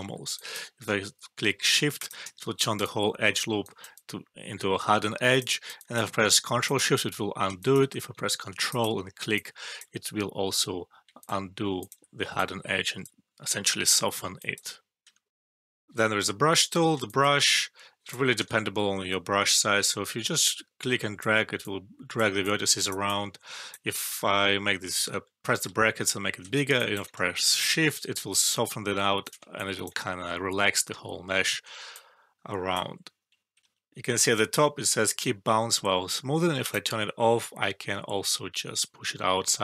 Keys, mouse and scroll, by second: 0.1 alt+middle click, 0.3 alt+click, 2.5 alt+right click, 3.1 alt+drag, 3.5-6.1 alt+right click, 4.9-5.5 alt+drag, 5.5 alt+right click, 5.7 alt+click, 9.3-9.9 alt+drag, 12.3-13.2 alt+drag, 14.1 alt+middle click, 14.3 alt+click, 15.3 alt+F12, 17.0 alt+click, 18.3 ctrl+z, 19.1 [, 19.7 [, 20.0-21.2 drag, 24.2-25.8 typing, 26.9 alt+click, 27.8-29.4 shift+drag, 30.9 ctrl+z, 31.9-32.8 drag, 36.6-39.6 drag.